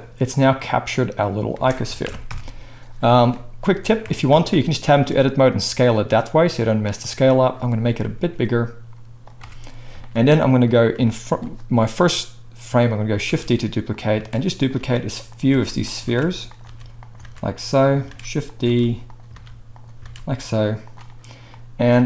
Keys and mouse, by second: 1.5 space, 2.0 shift+Left, 2.3 KP_1, 3.9 click, 4.0 Tab, 4.9 s, 7.1-11.0 middle drag, 8.1 s, 9.4 Tab, 13.2 shift+d, 14.3-20.2 typing, 14.7-22.0 shift+middle drag.